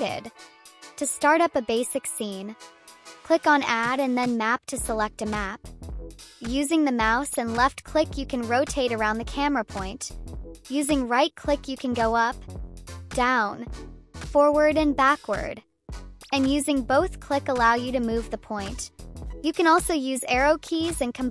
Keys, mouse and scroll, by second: 1.4 click, 2.4 click, 4.5 click, 6.0 click, 7.1-10.2 drag, 10.6-15.7 right drag, 16.3-18.1 drag, 16.3-18.0 right drag, 18.2 click, 18.6 right click, 18.9 click, 19.2 click, 19.8 Up, 20.1 Down, 20.5 Right, 20.7 Left, 21.0 Right, 21.1 Up, 21.2 Down.